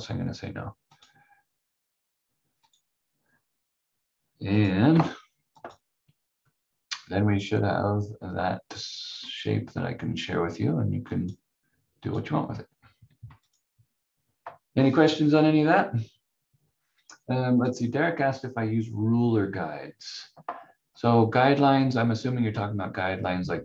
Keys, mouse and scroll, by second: 0.8 click, 4.9 F4, 5.5 click, 11.1 click, 17.6 click, 21.8 click.